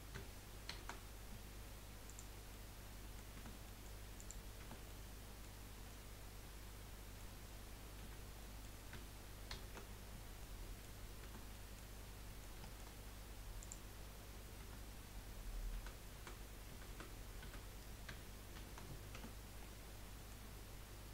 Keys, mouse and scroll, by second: 0.7 shift+n, 2.1 click, 2.5 middle click, 3.3 Tab, 4.2 click, 4.6 Tab, 4.9-8.0 middle drag, 8.0 a, 8.5-9.5 middle drag, 9.5 shift+n, 10.4 middle click, 11.2 Tab, 12.0-12.3 scroll down 2, 12.3 middle click, 12.9-13.6 scroll up 3, 13.6 click, 14.6 Tab, 15.7-17.4 typing, 18.5 shift+n, 19.1 Tab, 19.6 middle click.